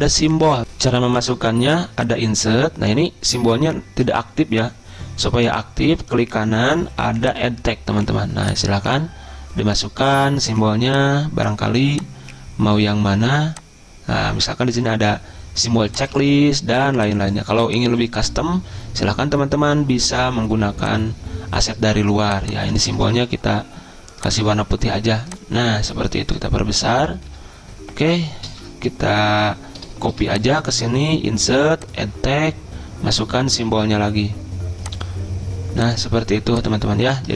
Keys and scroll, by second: 0.6 Delete, 0.6 alt+Tab, 23.2 ctrl+a, 26.4 ctrl+], 26.8 ctrl+], 27.0 ctrl+], 27.1 ctrl+], 28.5 ctrl+b, 30.1 ctrl+c.